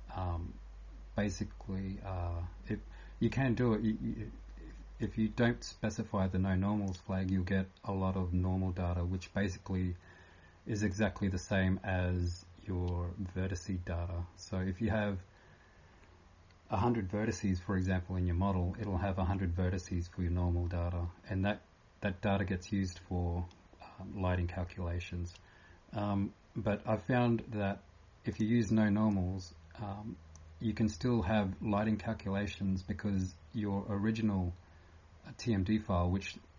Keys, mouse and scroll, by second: 0.0-36.5 typing.